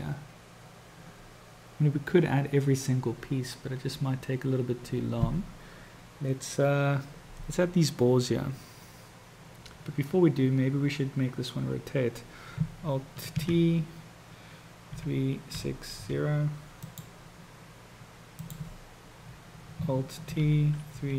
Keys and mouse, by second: 13.3 ctrl+t, 18.2 click, 20.3 ctrl+t.